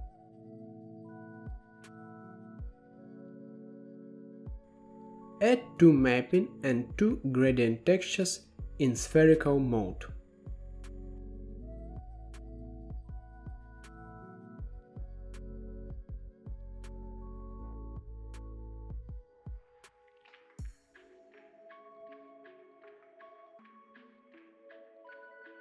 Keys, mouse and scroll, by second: 0.0 click, 0.7 drag, 3.2-3.7 scroll down 7, 3.7-5.5 middle drag, 5.5 click, 5.9 g, 6.6 middle click, 6.8 scroll up 5, 7.0-7.4 middle drag, 7.4 shift+a, 10.6-11.9 drag, 12.5 click, 12.7 middle click, 13.0 scroll down 4, 13.4 middle click, 13.6 g, 14.4 middle click, 14.9 shift+d, 16.0 scroll up 2, 16.1-16.8 middle drag, 16.8-18.2 drag, 18.2 shift+a, 20.6-21.9 drag, 21.9 scroll up 4, 22.2 middle click, 22.6-22.9 drag, 22.9 middle click, 23.5 shift+d, 25.2 middle click, 25.5 scroll down 6.